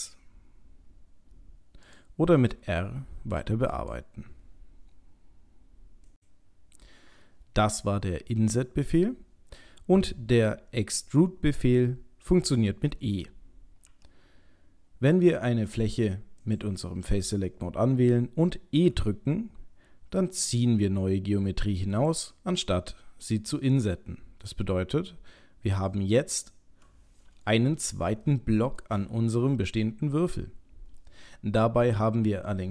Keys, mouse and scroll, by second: 2.3 r, 15.7 click, 16.4 click, 18.8 e, 22.5 middle click, 26.5 middle click, 28.3 shift+middle click, 28.8 shift+middle click, 28.9 shift+middle click, 31.9 middle click.